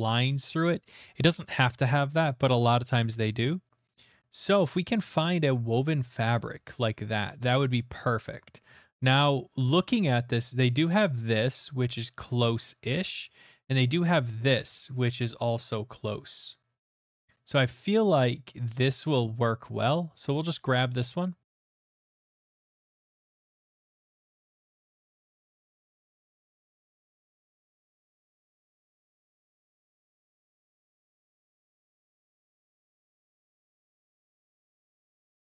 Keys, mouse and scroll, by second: 4.1 click, 5.0-6.0 scroll, 5.4 right click, 6.5 scroll, 7.4 scroll, 8.2-9.1 scroll, 8.6 click, 9.9 scroll, 12.9 scroll, 13.8 click, 14.2 middle click, 15.5 middle click, 16.1 click, 20.5 click, 21.4 click, 21.9 click, 22.5 click, 23.1 click, 23.5 click, 23.7-24.0 scroll, 24.3 click, 24.4 click, 24.5-25.3 typing, 24.6 click, 24.6 middle click, 25.3 Return, 26.1 click, 26.6 click, 26.7 click, 27.5 click, 28.1 click, 28.5 click, 28.8 middle click, 30.1 click, 30.7 click, 31.0 click, 31.5 click, 31.7 click, 32.1 Delete, 32.4 click, 33.2 click, 34.1 click, 34.1 Delete, 34.5 click, 35.2 click, 35.4 alt+Tab.